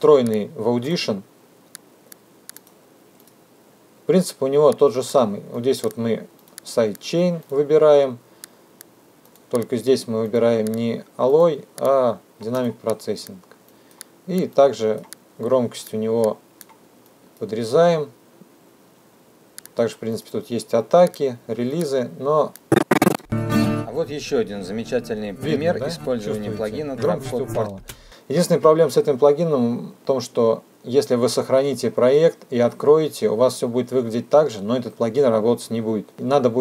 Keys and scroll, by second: 22.6 space, 26.8 space.